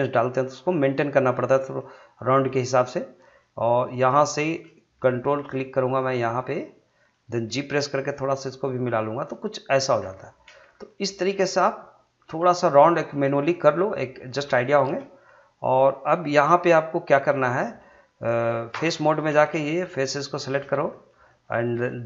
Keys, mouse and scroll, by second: 0.5 click, 1.8 middle click, 2.4 scroll up 1, 2.6 middle click, 3.9 click, 6.0 ctrl+click, 6.4-7.8 middle drag, 7.8 g, 9.7 click, 10.0 scroll down 1, 10.2 middle click, 10.7 scroll down 1, 10.9 middle click, 11.3 scroll up 1, 11.5 middle click, 13.3 scroll up 1, 13.5 middle click, 14.5 shift+scroll down 1, 14.7 shift+middle click, 15.5 click, 16.4 g, 17.1 click, 17.4 scroll down 1, 17.6 middle click, 18.7 3, 19.1 click, 19.6 shift+click, 20.7 scroll down 1, 20.9 middle click.